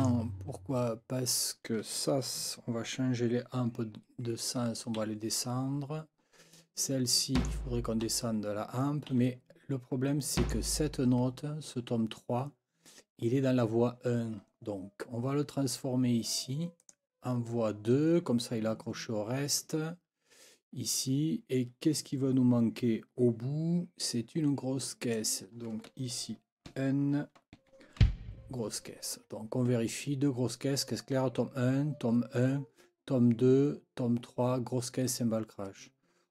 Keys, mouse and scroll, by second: 0.0 click, 5.0 x, 7.4 click, 8.0 x, 9.1 x, 10.4 click, 16.8 click, 25.1 click, 26.7 n, 27.5 4, 28.0 b, 29.2 Escape.